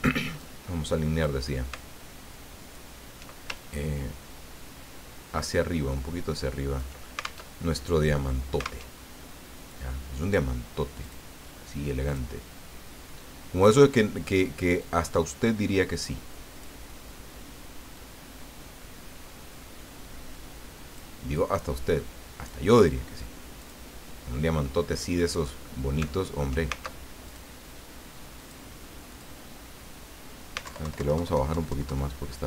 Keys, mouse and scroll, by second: 0.4-1.5 drag, 1.7-2.9 alt+drag, 3.5-7.1 ctrl+alt+drag, 7.5 ctrl+alt+Tab, 8.9 alt+Tab, 11.0 click, 12.1 click, 13.6 click, 14.8-17.0 drag, 17.9-21.1 drag, 21.3-22.6 drag, 23.6 click, 27.3 alt+click, 28.4 click, 29.1 click, 30.6 alt+Down.